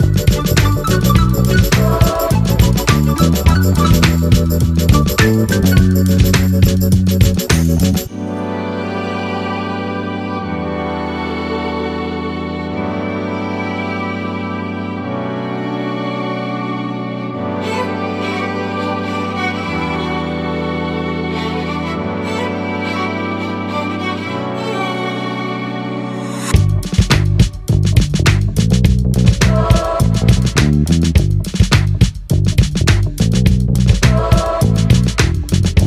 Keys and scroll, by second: 2.2 F7, 3.5 ctrl+shift+F9.